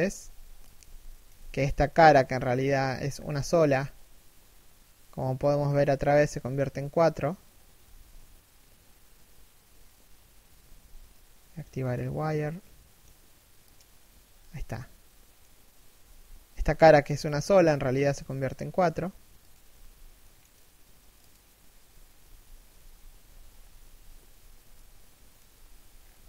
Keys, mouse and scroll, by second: 0.4 Tab, 0.4 z, 0.7 shift+middle click, 0.9 z, 1.2 right click, 1.5 middle click, 2.8 z, 2.9 scroll up 1, 3.2 z, 3.6 middle click, 4.9 scroll up 1, 10.3 z, 13.8 scroll down 1, 14.2 middle click, 23.1 scroll down 1, 23.4 KP_3, 23.8 KP_1, 24.4 shift+middle click, 25.6 scroll down 1.